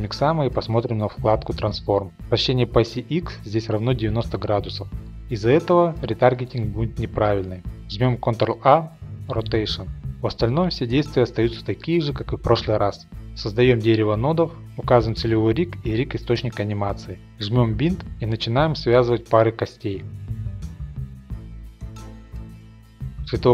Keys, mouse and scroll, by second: 0.3 click, 0.9 shift+middle click, 4.0 middle click, 4.1 middle click, 4.5 middle click, 7.0 ctrl+a, 8.0 click, 10.4 click, 10.4 click, 10.8-11.4 scroll, 11.4 click, 12.3 click, 12.7 middle click, 13.0 click, 13.6 a, 14.0 click, 14.3 click, 14.4 middle click, 14.6 click, 15.0 click, 15.4 click, 16.0 click, 16.3 click, 16.3 middle click, 16.4 middle click, 16.4 ctrl+Tab, 16.5 click, 16.5 shift+click, 16.7 click, 16.8-17.2 scroll, 17.0 shift+click, 17.0 click, 17.1 click, 17.2 click, 17.4 shift+click, 17.5 click, 17.6 shift+scroll, 17.7 click, 17.8 click, 17.9 shift+click, 17.9 middle click, 18.0 click, 18.2 middle click, 18.2 shift+click, 18.3 click, 18.3 middle click, 18.5 middle click, 18.5 click, 18.7 click, 18.7 click, 18.8 click, 18.9 middle click, 19.0 shift+click, 19.0 click, 19.1 click, 19.2 middle click, 19.3 middle click, 19.4 shift+middle click, 19.4 click, 19.5 shift+click, 19.5-20.6 scroll, 19.6 click, 19.7 click, 19.8 shift+middle click, 19.8 shift+click, 19.8 click, 19.9 click, 20.4 shift+click, 20.6 shift+middle click, 20.6 shift+click, 21.3 middle click, 21.5 middle click, 21.5 shift+click, 21.6 click, 21.7 click, 21.7 middle click, 21.8 shift+click, 21.8 click, 21.9 click, 21.9 middle click, 22.0 shift+click, 22.1 click, 22.2 click, 22.2 middle click, 22.2 click, 22.3 middle click, 22.3 shift+middle click, 22.4 click, 22.5 shift+click, 22.6 click, 22.7 middle click, 22.8 shift+middle click, 22.8 click, 22.9 middle click, 22.9 shift+click, 23.1 middle click.